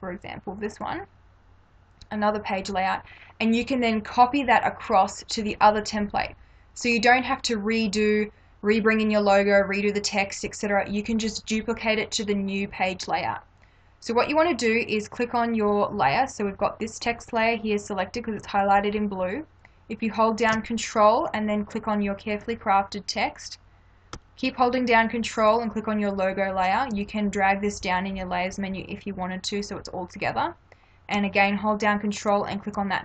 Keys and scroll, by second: 2.7 space.